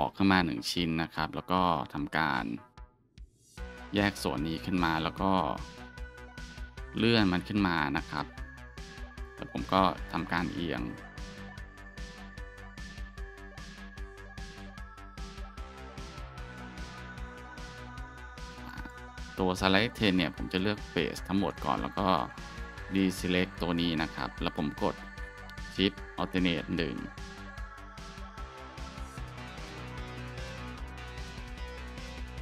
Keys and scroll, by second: 0.5 Tab, 3.5 p, 4.7 Tab, 7.0 g, 7.7 z, 9.8 r, 15.4 shift+s, 17.7 r, 19.3 Tab, 20.0 scroll, 20.6 alt+scroll, 21.8 alt+shift+scroll, 23.4 Tab, 25.5 scroll, 28.1 alt+shift+1.